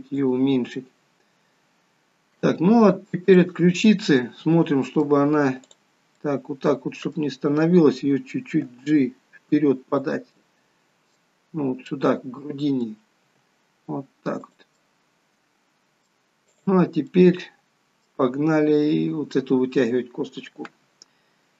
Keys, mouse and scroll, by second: 3.0 click, 3.6 middle click, 5.9 click, 6.6 middle click, 8.9 g, 10.5 middle click, 12.1 middle click, 13.4 g, 15.0 middle click, 16.7 click, 17.2 middle click.